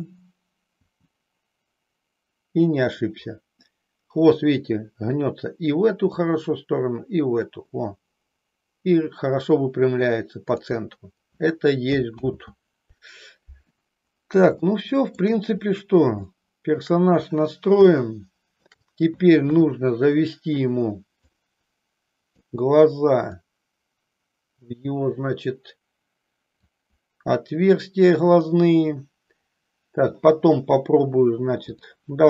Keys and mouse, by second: 0.9 g, 10.5 click, 12.4 ctrl+z, 14.6 shift+middle click, 16.4 shift+middle click, 18.0 shift+middle click, 19.5 KP_3, 21.3-22.5 drag, 23.4-26.6 drag, 31.6-32.2 drag.